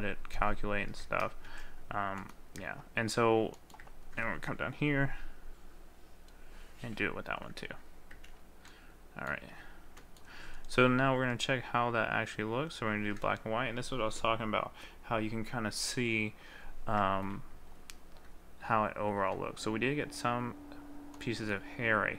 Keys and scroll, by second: 1.5 ctrl+z.